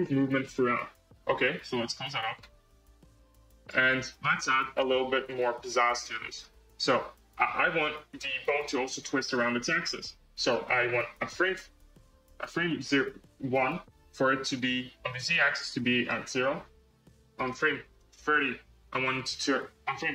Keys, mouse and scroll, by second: 1.8-2.3 drag, 3.1-4.7 drag, 4.7 space, 5.5-6.0 drag, 6.0-8.5 middle drag, 10.8-15.4 drag, 15.4-17.2 right drag, 17.2-20.0 drag.